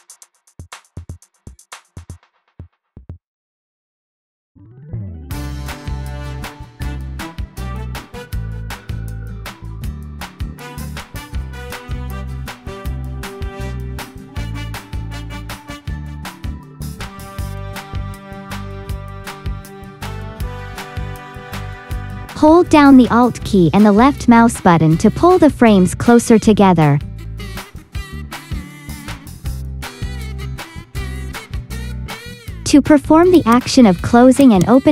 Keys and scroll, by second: 17.4 typing, 19.9 space, 20.8 space, 27.8 space, 32.4 t.